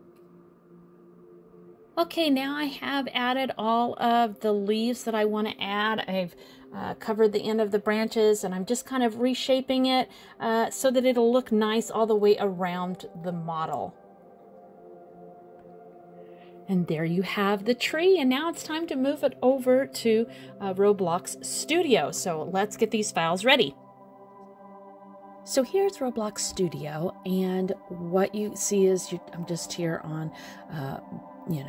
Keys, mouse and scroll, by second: 0.6 middle click, 1.6 click, 2.2 middle click, 3.2 click, 5.2 click, 5.9 g, 8.0 click, 8.3 g, 9.9 middle click, 10.6 middle click, 12.7 middle click, 13.0 scroll up 1, 13.1-13.5 scroll down 4, 13.5 middle click, 16.9 click, 17.7-18.1 scroll up 2, 18.1 middle click, 18.5 scroll down 1, 18.6 middle click, 19.1 shift+middle click, 19.5 middle click, 20.0 middle click, 20.4 shift+middle click, 20.9 scroll up 2, 21.5 scroll down 1, 21.8 middle click.